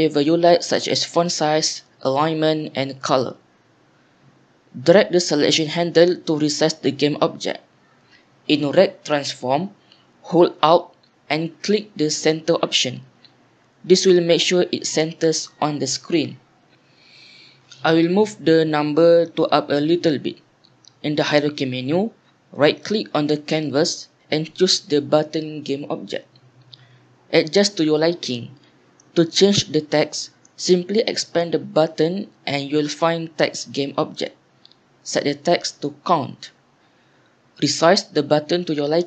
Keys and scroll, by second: 29.7 f, 35.5-37.5 typing.